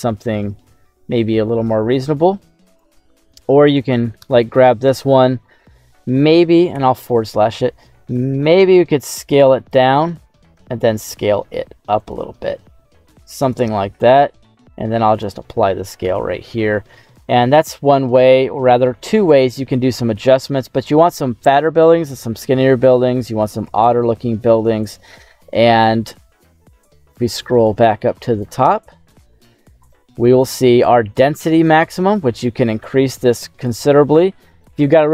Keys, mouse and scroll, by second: 3.6-5.7 right drag, 5.7 middle click, 6.7 /, 8.7 s, 9.5 click, 10.3 s, 10.5 z, 11.9 click, 12.2 s, 13.4 click, 14.0 ctrl+a, 16.0 /, 16.6 middle click, 17.2 scroll up 2, 17.5 middle click, 18.0-18.7 scroll down 2, 18.7 middle click, 21.3 middle click, 22.6 middle click, 24.1 middle click, 24.8 right click, 26.4-26.7 scroll down 2, 26.7 middle click, 27.2 middle click, 27.6 middle click, 28.1 middle click, 28.9 middle click, 29.8-30.3 scroll up 4, 30.3 middle click, 31.6-34.6 drag.